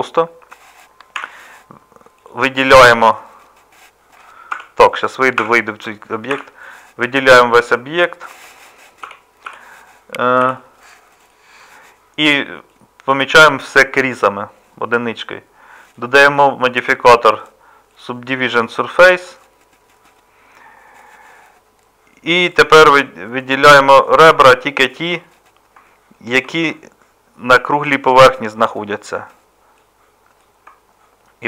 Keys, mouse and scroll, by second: 0.1-1.2 middle drag, 1.2 a, 2.3 a, 4.5 Tab, 6.3 a, 9.0 m, 10.4 n, 21.1-24.6 middle drag, 25.2 middle click.